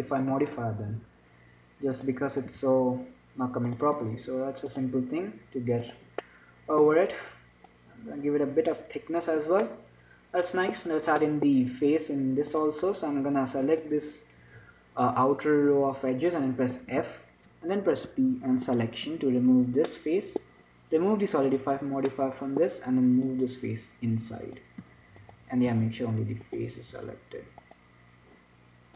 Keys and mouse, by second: 0.0 middle click, 0.5 Tab, 2.9 x, 4.3 Tab, 6.3 click, 6.5-8.0 middle drag, 8.0-10.0 drag, 10.0-12.8 middle drag, 11.2 Tab, 12.8-14.0 drag, 14.0-17.2 middle drag, 17.2 f, 18.2 p, 19.4 Tab, 20.2-26.0 drag, 25.0 z, 26.0-27.2 right drag, 26.0 z, 27.2-28.9 drag, 27.2 z.